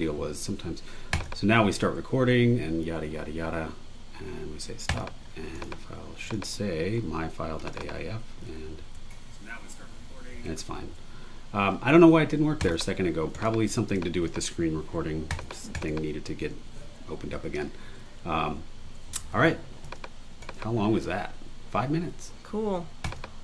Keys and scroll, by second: 8.8 space, 10.3 space, 10.8 super+w.